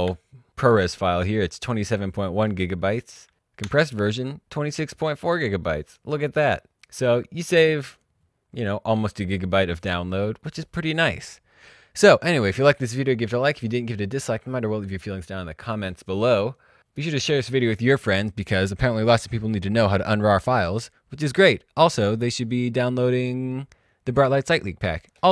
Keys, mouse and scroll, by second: 2.3 click, 9.3 click.